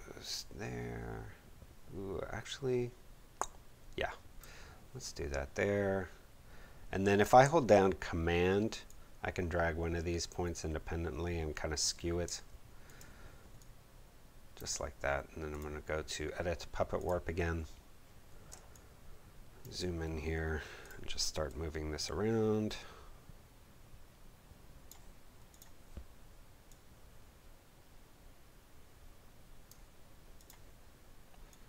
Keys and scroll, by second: 18.5 space.